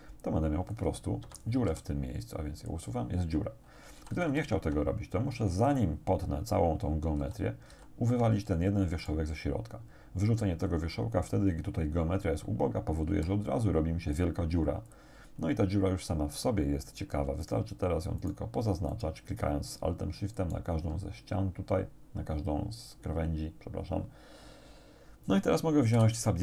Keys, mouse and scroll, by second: 1.3 Escape, 1.7 x, 2.7 click, 4.0 ctrl+z, 7.3 ctrl+z, 9.1 right click, 13.1 x, 14.9 right click, 17.5 alt+shift+right click, 18.3 alt+shift+right click, 18.9 alt+shift+right click, 20.4 alt+shift+right click, 26.0 w.